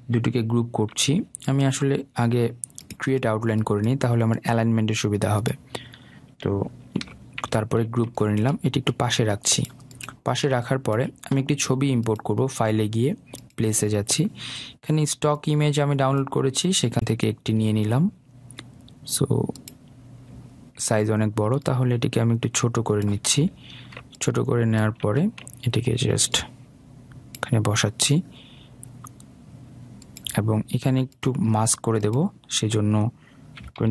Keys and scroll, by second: 1.2 ctrl+g, 7.3 ctrl+g.